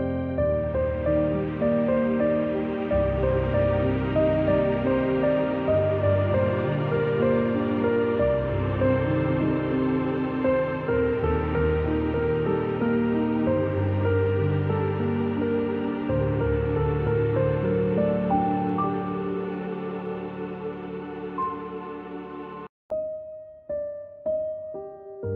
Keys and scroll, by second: 13.2 z, 14.4 space, 15.3 space, 18.0 space, 22.6 a.